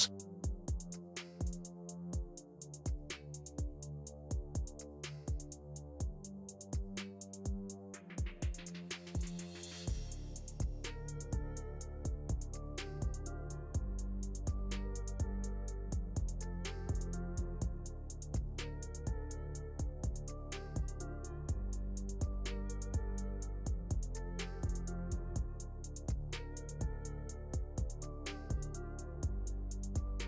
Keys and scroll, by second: 7.1 F3, 7.5 Escape, 17.0 F3, 21.8 shift+F2.